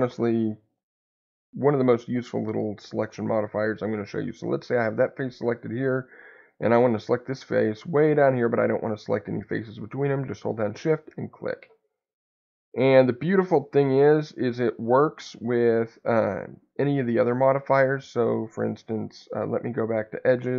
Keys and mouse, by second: 0.6 click.